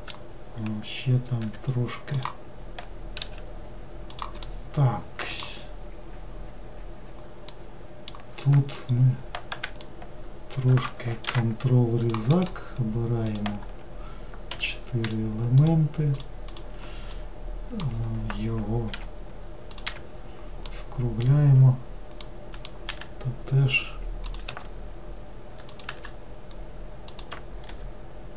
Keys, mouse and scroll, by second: 1.5 e, 3.3 5, 4.2 s, 4.5-5.6 middle drag, 5.6-7.6 scroll down 1, 7.6-8.8 middle drag, 8.8-9.8 scroll up 2, 9.8-11.3 shift+middle drag, 11.3 ctrl+r, 13.3 click, 14.6 3, 15.1 shift+click, 15.6 shift+click, 16.2 shift+click, 16.6 shift+click, 17.2-19.0 middle drag, 19.0 n, 19.7 click, 19.9 n, 20.7-22.9 middle drag, 22.9 e, 24.5 s, 25.9 e, 27.7 r.